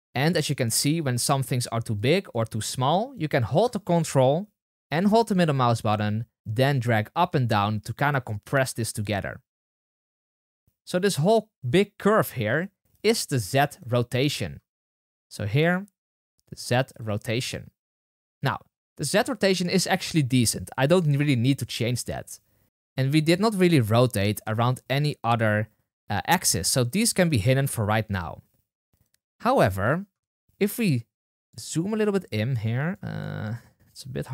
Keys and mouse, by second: 12.9 middle click, 13.7 middle click, 15.5 click, 16.6 click, 16.8 click, 17.1 click, 17.3 click, 25.3-26.2 drag, 26.5 click, 26.9 click, 28.9 click, 33.4-34.3 middle drag.